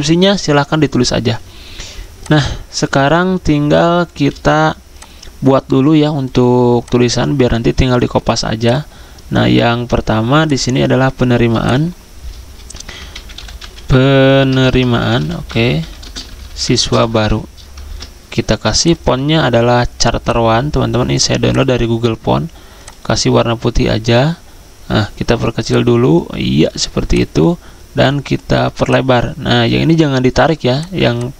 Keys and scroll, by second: 4.3 z, 12.7 Caps_Lock, 13.3-18.3 typing, 23.1-23.8 typing.